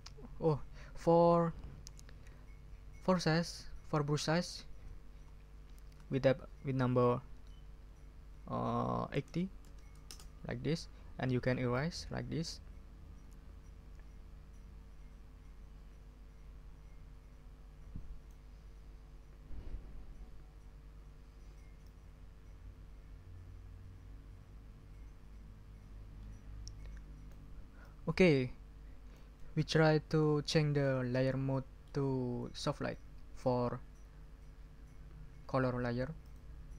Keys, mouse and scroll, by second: 3.1-4.4 ctrl+drag, 5.9 ctrl+a, 9.1 8, 9.6 0, 10.0 Return, 11.2 middle click, 11.7-18.5 drag, 21.8-27.5 drag, 27.8-29.3 drag, 29.5 middle click, 30.8-32.0 middle drag, 36.2 click.